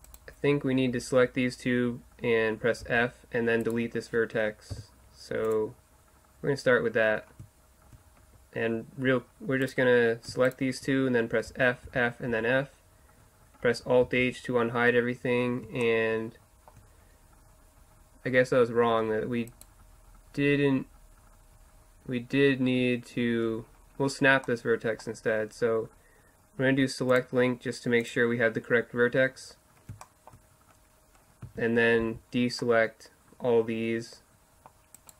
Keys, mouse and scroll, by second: 0.1-2.8 right drag, 2.8 f, 3.6-5.4 right drag, 4.7 Delete, 7.0-9.6 drag, 9.6-12.3 right drag, 11.5 f, 11.9 f, 12.3 f, 14.0 alt+h, 19.5-21.5 right drag, 21.5-23.7 middle drag, 23.8-24.2 middle drag, 24.7-27.0 middle drag, 28.1 click, 28.7 middle click, 30.1 middle click, 30.7 middle click, 31.4 z, 31.8 middle click, 32.0 c, 35.1 right click.